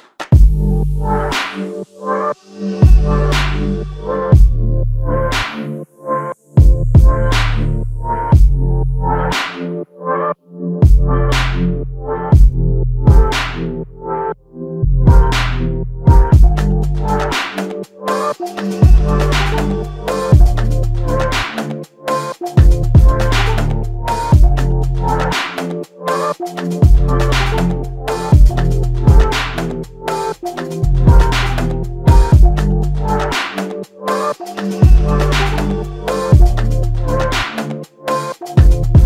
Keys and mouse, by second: 4.5 ctrl+click, 7.9 shift+click, 9.8 alt+click, 12.9 alt+click, 14.3 alt+click, 15.9 alt+click, 16.8 shift+click, 24.7 alt+click, 25.6 alt+click, 28.8 alt+click, 32.5 space, 34.9 alt+click, 36.4 alt+click.